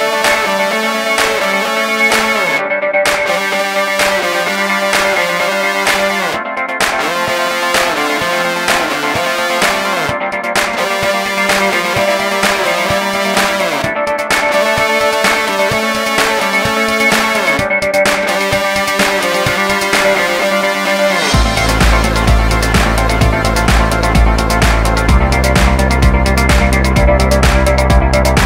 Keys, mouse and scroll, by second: 0.0 0, 0.1 Return, 1.1 Tab, 1.9 right click, 2.0 ctrl+click, 3.3 Delete, 3.9 Return, 4.2 Tab, 4.6 click, 6.0 click, 6.7 click, 6.8 click, 8.1 ctrl+a, 8.4 click, 11.2 click, 12.0 click, 12.3 Tab, 12.4 a, 13.2 click, 13.8 click, 14.0 click, 15.3 click, 17.6 ctrl+r, 17.7 click, 18.2 click, 18.6 Tab, 18.7 a, 19.2 click, 19.7 alt+right click, 20.2 Delete, 20.4 Return, 20.8 alt+right click, 22.0 click, 22.1 click, 22.4 alt+right click, 23.2 middle click, 23.4 middle click, 23.6 ,, 23.7 scroll down 1, 23.8 middle click, 24.0 middle click, 24.9 e, 25.0 y, 25.9 click, 26.2 1, 26.7 3, 26.8 scroll down 1, 27.4 Tab, 27.7 click.